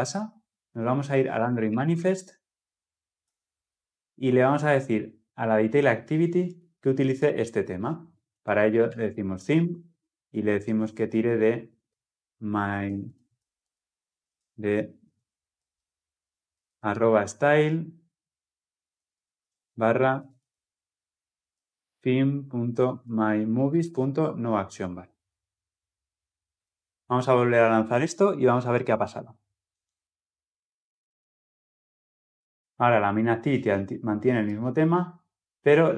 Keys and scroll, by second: 9.4 Return, 15.3 ctrl+z, 19.5 ctrl+z, 23.9 Return, 28.0 shift+F10.